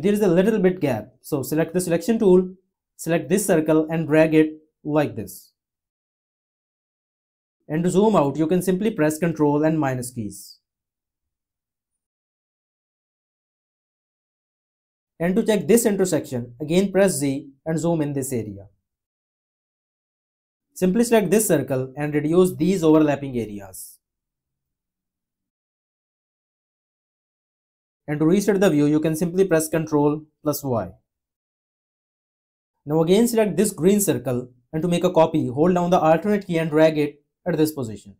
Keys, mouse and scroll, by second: 9.5 -, 17.1 z, 26.3 -, 29.9 y, 36.2 click.